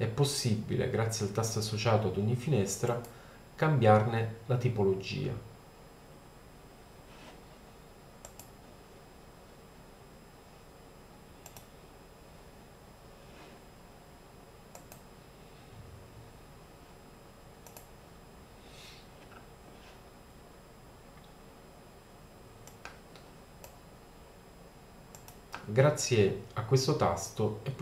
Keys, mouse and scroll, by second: 2.9-4.5 drag, 4.5-5.0 middle drag, 8.3-8.9 drag, 10.3-11.4 middle drag, 11.5-13.3 middle drag, 15.3 click, 17.2 middle click, 17.7 click, 22.7 middle click, 22.9-24.2 drag, 24.3 middle click, 25.5 click, 26.1-27.4 middle drag.